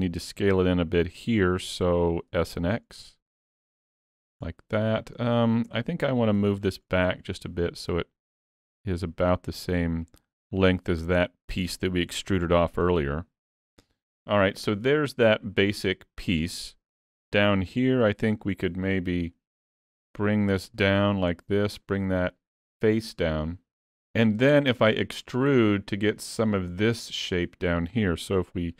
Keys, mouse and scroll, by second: 2.3 s, 4.6 middle click, 5.7 Tab, 6.4 3, 6.6 click, 7.0 middle click, 8.0 click, 12.4 Tab, 12.8 middle click, 15.2 middle click, 16.6 middle click, 17.1 Tab, 17.7 3, 18.1 click, 18.4 middle click, 19.1 KP_3, 20.7 click.